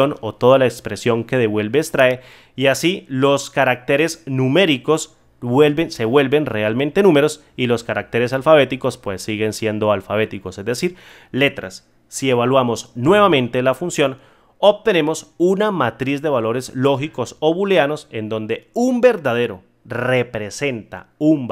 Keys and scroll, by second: 13.0 F9.